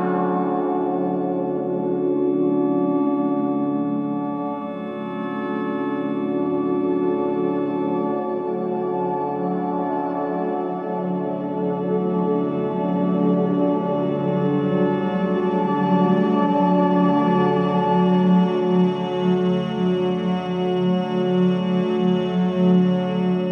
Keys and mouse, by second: 2.9-3.5 drag, 4.3 ctrl+KP_Add, 4.7 ctrl+KP_Add, 7.7 ctrl+KP_Add, 9.2 middle click, 12.0 ctrl+KP_Add, 12.4 ctrl+KP_Add, 13.8-15.3 right drag, 19.0 alt+p, 20.6 alt+p, 21.2 Tab, 21.6 alt+p.